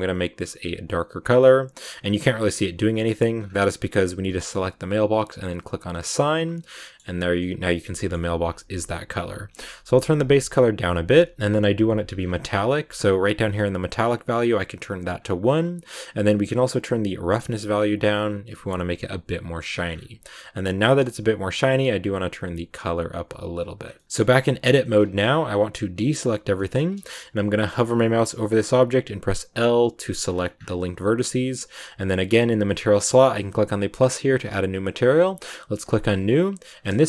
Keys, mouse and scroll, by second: 2.8 Tab, 3.3 scroll up 3, 5.8 click, 6.6 scroll down 2, 6.7 middle click, 6.9 Tab, 8.3 scroll down 2, 8.8 click, 12.0 scroll down 2, 13.9-15.1 drag, 15.1 scroll down 4, 16.2-18.9 drag, 18.9 middle click, 19.7 scroll up 3, 20.6 click, 23.7 scroll down 3, 23.9 middle click, 24.0 scroll up 1, 25.2-25.8 scroll up 1, 25.8 a, 26.4 shift+scroll up 1, 26.5-29.4 shift+middle drag, 29.4 l, 30.1-30.5 scroll up 10, 33.7-37.0 drag.